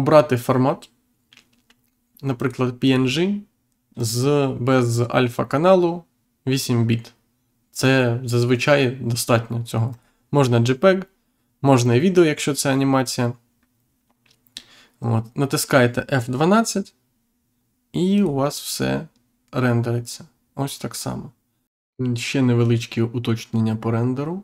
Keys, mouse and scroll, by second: 2.3 click, 3.9 click, 9.8 click, 18.1 click.